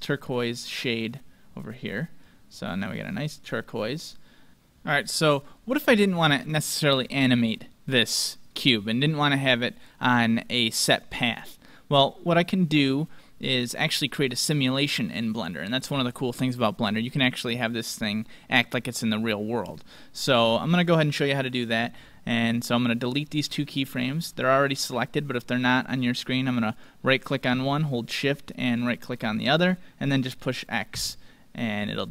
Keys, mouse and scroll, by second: 2.7-4.5 drag, 3.9 right click, 7.4-9.3 drag, 25.2-28.5 right drag, 28.6-30.3 right drag, 30.9 x.